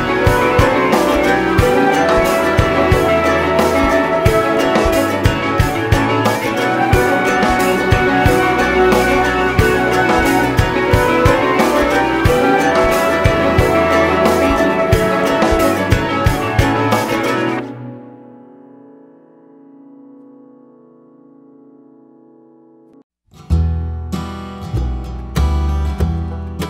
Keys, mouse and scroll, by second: 0.1-2.9 typing, 1.8 click, 4.6 scroll, 4.8 e, 8.6 `, 9.4 `, 9.8 Tab, 10.6 click, 10.8 `, 11.5 `, 16.4 `, 16.8 Tab, 17.3 `, 17.9 alt+a, 18.0 scroll down 1, 18.5 KP_1, 18.7 scroll up 1, 18.9-19.2 scroll down 1, 19.4 scroll up 1, 19.7-20.4 scroll down 1, 20.5-20.8 scroll up 1, 20.8 click, 21.0-21.4 scroll down 1, 21.4 r, 23.4 alt+a, 24.3 scroll down 1, 24.5-25.0 scroll up 1.